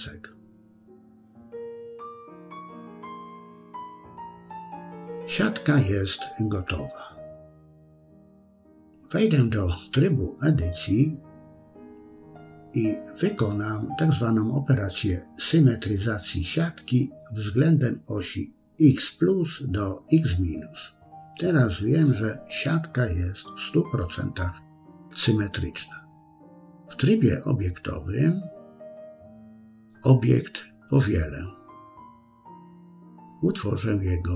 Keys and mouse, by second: 0.9 KP_1, 2.2 shift+middle click, 3.5-5.4 drag, 8.2 Tab, 11.0 a, 15.2-17.6 drag, 21.9 Tab, 25.9-27.3 middle drag, 27.9 KP_1, 29.7-31.8 right drag, 32.5-34.2 right drag.